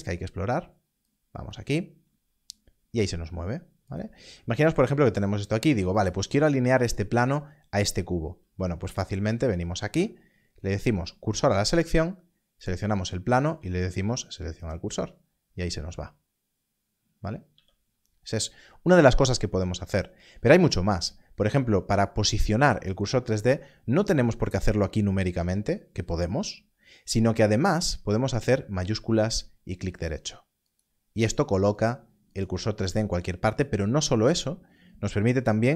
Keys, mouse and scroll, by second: 1.0 click, 3.8 click, 4.1 g, 4.7 click, 9.6 shift+s, 11.7 click, 13.2 shift+s, 14.6 click, 17.5 click, 18.3 g, 18.3 click, 29.9 shift+right click.